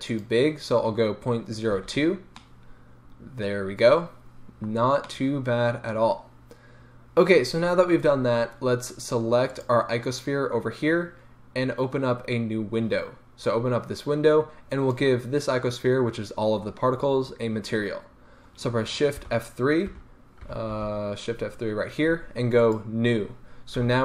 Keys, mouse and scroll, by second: 0.1-2.4 drag, 1.8 a, 2.1-2.4 scroll up 2, 2.4-9.5 middle drag, 4.7 scroll down 1, 9.5 click, 13.4-23.0 drag, 19.2 shift+F3, 23.8 n.